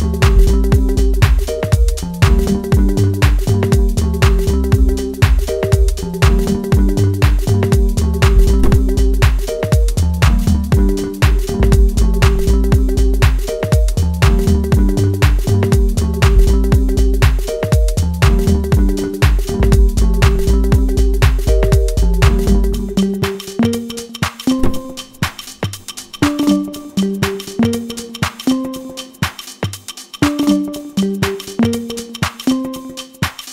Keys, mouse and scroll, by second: 0.4 g, 2.0 r, 3.1 s, 3.8 middle click, 4.3 shift+z, 5.1 s, 6.6 middle click, 7.5 KP_1, 8.3 Tab, 8.8 s, 10.1 s, 10.8 middle click, 14.8-15.1 scroll down 1, 15.1-15.9 scroll up 2, 15.9 scroll down 2, 16.2 middle click, 25.6 scroll down 1, 25.8 middle click, 26.8-27.3 scroll up 2, 27.9 middle click, 28.6 Tab, 28.9 click, 29.8 shift+z, 30.1 click, 30.8 click, 31.5 Delete, 32.6 Delete.